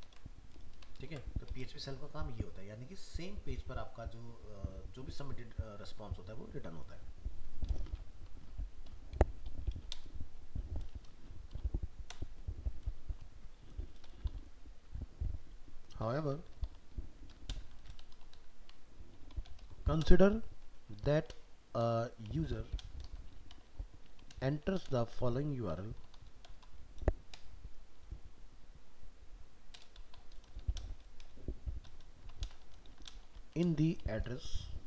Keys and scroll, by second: 0.0 ctrl+v, 1.1 ctrl+s.